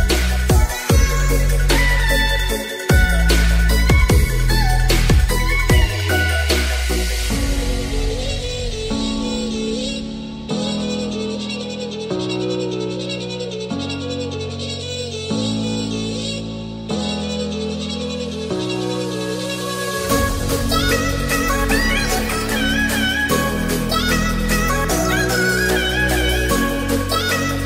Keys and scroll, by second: 27.4 ctrl+j.